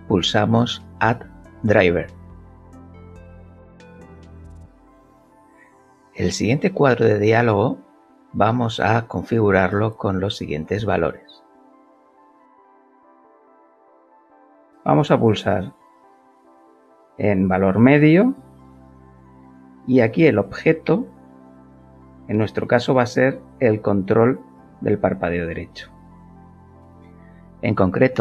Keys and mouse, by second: 1.8 alt+click, 4.3-10.7 alt+middle drag, 10.7 alt+click, 15.5 click, 19.8 click, 23.6 click.